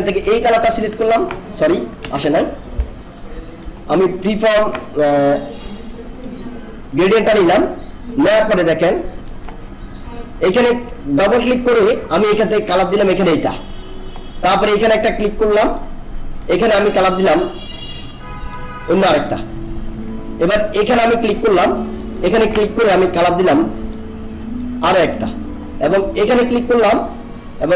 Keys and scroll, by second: 2.0 ctrl+z.